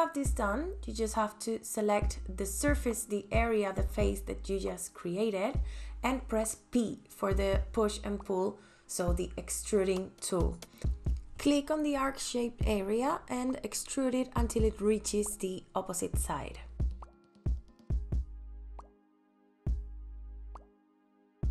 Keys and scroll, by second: 11.3 p, 18.3 space.